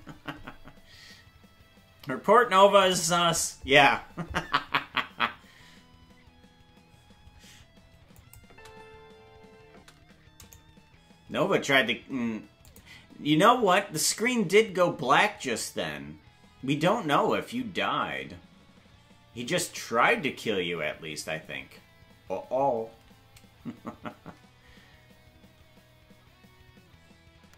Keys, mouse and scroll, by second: 8.2 click, 10.3 right click, 10.3 space, 12.6 click.